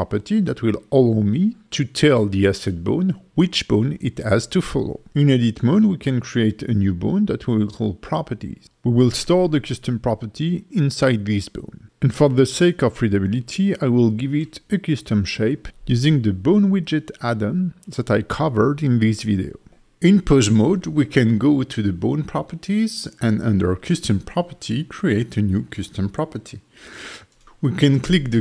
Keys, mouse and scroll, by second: 4.4 click, 5.0 shift+d, 5.4 z, 6.2 click, 6.7 alt+middle click, 7.4 s, 8.1 click, 8.4 F2, 12.4 n, 13.8 click, 14.7 click, 19.7 Tab, 20.0 click, 20.3 alt+middle click, 20.8 click, 21.2 n, 21.4 click, 21.7 click, 22.0 click, 22.2 click, 23.0 click, 24.4 click, 25.6 click.